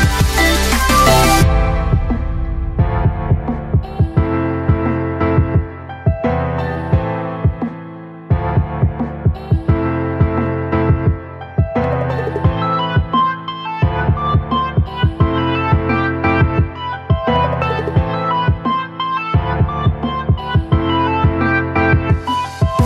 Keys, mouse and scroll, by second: 4.6 Return, 5.2 Tab, 6.1-7.5 typing, 8.0-10.0 right drag, 10.0 Tab, 11.5-15.3 right drag, 15.3 Return, 15.8 Tab, 17.8-18.5 typing, 19.7-21.7 typing.